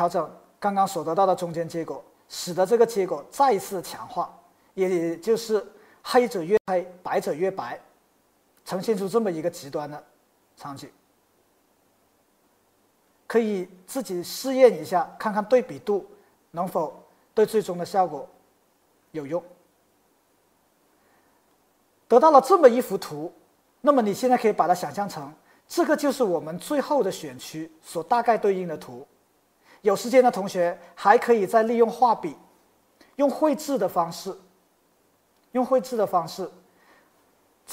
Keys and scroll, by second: 32.3 b, 35.6 b.